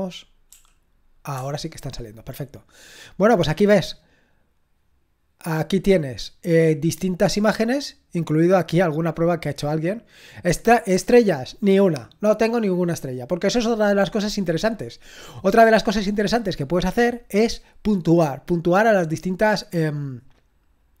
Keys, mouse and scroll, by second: 0.5 typing, 6.7-8.8 drag, 8.9 click.